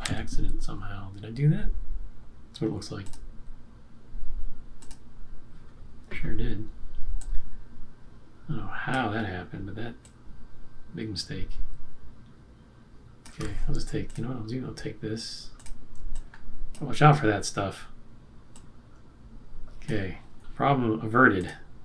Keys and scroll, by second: 0.0 q, 1.5 q.